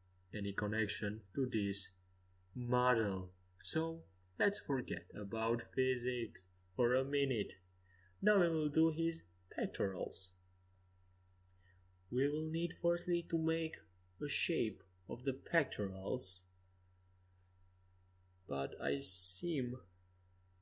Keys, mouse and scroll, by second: 1.4 middle click, 4.9-7.8 drag, 5.7-11.0 right drag, 11.0-12.4 drag, 12.4 ctrl+z.